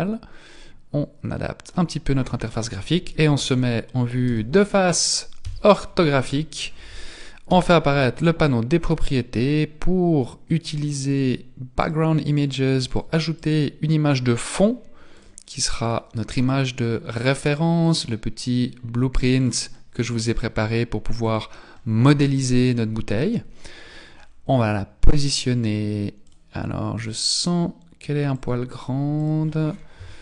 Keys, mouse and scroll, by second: 4.2 KP_1, 5.4 KP_5, 7.5 n, 11.0 click, 11.8 click, 12.9 click, 15.1 click, 15.8 click, 21.3 click, 22.5-23.2 scroll up 2, 23.2-24.1 scroll up 1, 24.1-24.4 scroll down 6, 24.2 scroll up 1, 24.5-26.2 scroll down 2, 26.2 click, 28.3 click, 29.2 click.